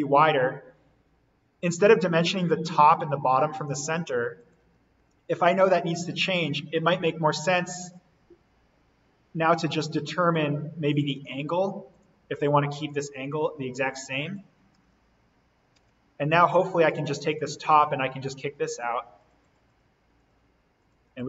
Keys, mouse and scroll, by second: 0.3-0.9 scroll down 1, 1.6 z, 4.3 click, 5.0 Delete, 7.5 d, 10.8 click, 16.8 click.